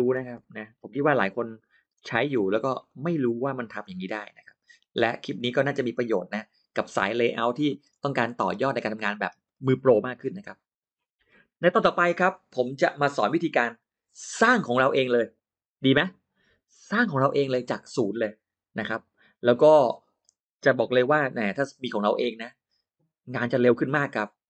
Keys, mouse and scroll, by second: 0.0-0.6 typing, 1.4 click, 2.0 click, 2.6 click, 3.2 click, 3.6-5.4 drag, 6.1 click, 6.5-6.8 scroll down 1, 6.8 click, 7.6-7.9 scroll down 2, 8.2-8.6 scroll up 2, 8.6-8.9 scroll down 2, 9.0-9.6 scroll up 4, 9.2 middle click, 9.6 middle click, 10.0 middle click.